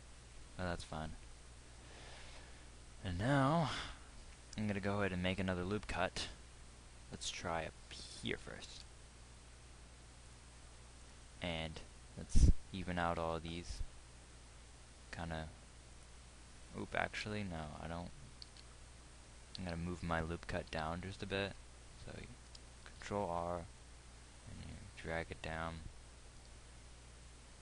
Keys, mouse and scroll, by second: 0.1 z, 1.9 KP_1, 4.1 Tab, 8.9 ctrl+r, 12.1-15.5 drag, 13.4 g, 16.4-17.9 drag, 17.9 ctrl+z.